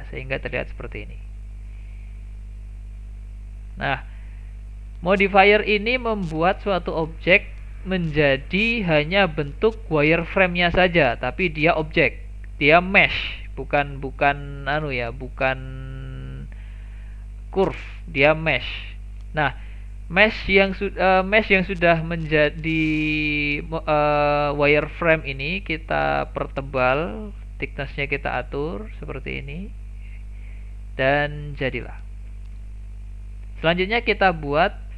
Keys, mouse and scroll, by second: 0.8 click, 2.6 click, 5.0-5.9 scroll down 2, 5.9 click, 7.6 click, 8.2-10.4 scroll up 4, 24.1-24.8 scroll down 2, 24.8-25.9 shift+middle drag, 25.9-29.1 drag, 30.1 click, 30.7-31.1 scroll down 1, 31.1-31.6 middle drag, 31.6-31.9 scroll down 1, 31.9 shift+middle click, 32.2-32.5 scroll down 1, 32.5-34.5 middle drag, 34.5 KP_1.